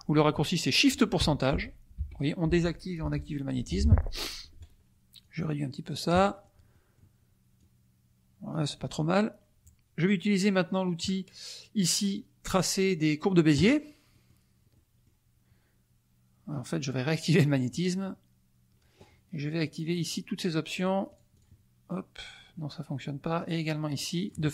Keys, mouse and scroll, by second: 4.2 shift+click, 5.2 click, 6.5 middle click, 6.7 middle click, 7.5-9.0 drag, 8.7 middle click, 13.5 click, 14.3 middle click, 14.4 click, 14.7 click, 17.4 click, 20.1 click, 20.4 click, 20.7 click, 23.4 click, 23.9 click, 24.2 click.